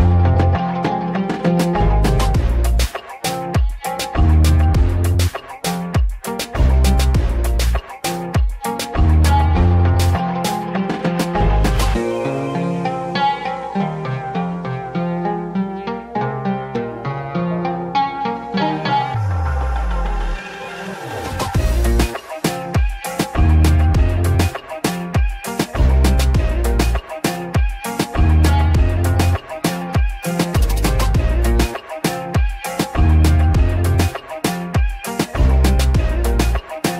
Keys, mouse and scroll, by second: 1.3 click, 2.0-2.4 scroll down 5, 2.4 shift+middle click, 2.6-3.0 shift+scroll up 1, 4.1-5.2 drag, 5.6 shift+click, 6.6-7.0 scroll up 4, 7.0 shift+middle click, 7.4-8.1 scroll up 5, 8.1-8.5 scroll down 1, 8.5 shift+click, 8.8 shift+click, 9.0 shift+click, 9.2 shift+click, 9.5 shift+click, 9.7 scroll up 1, 9.9 shift+middle click, 10.4-10.8 scroll down 5, 10.8 shift+click, 11.0 shift+click, 11.3 shift+click, 11.5 shift+click, 12.0 shift+click, 12.2 shift+click, 12.4 shift+middle click, 13.1 shift+click, 13.3 shift+click, 13.9 shift+click, 14.5 shift+click, 14.7 shift+click, 15.1 shift+click, 15.3 shift+click, 15.6 shift+click, 15.8-17.1 scroll up 5, 17.1 middle click, 17.4 scroll down 4, 18.2 shift+middle click, 18.8-19.2 scroll up 1, 19.2-20.6 shift+middle drag, 20.6 e, 23.0 scroll up 1, 23.1-27.0 middle drag, 27.0 g, 31.4 ctrl+b.